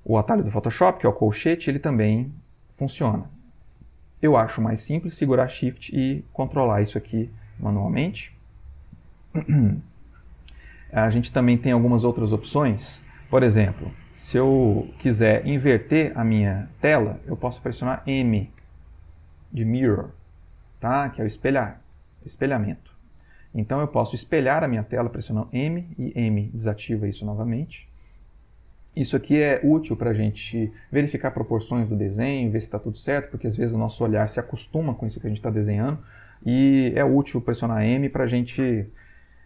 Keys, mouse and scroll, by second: 0.6 [, 1.4 ], 2.9 [, 5.5-8.2 shift+drag, 13.9-15.3 drag, 15.7 click, 16.4 click, 18.7 m, 20.9 m, 28.2 m, 37.5 m.